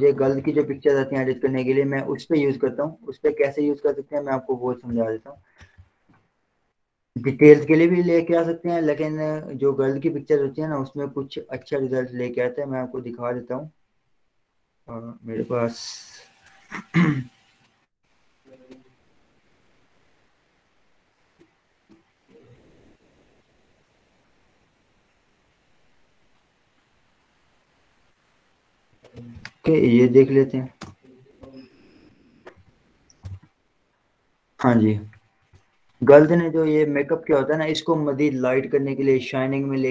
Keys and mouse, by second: 0.2 ctrl+o, 2.5 click, 5.9 click, 11.4-23.6 drag, 29.4 click, 31.2 Return, 32.6 ctrl+0, 33.5 ctrl+j, 33.7 z, 35.1-39.6 drag.